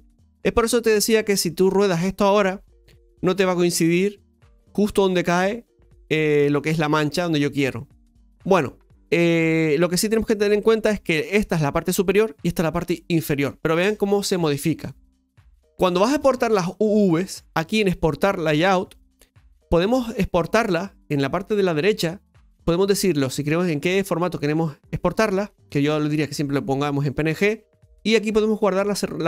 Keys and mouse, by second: 8.0 middle click, 10.4 right click, 16.8-29.2 drag.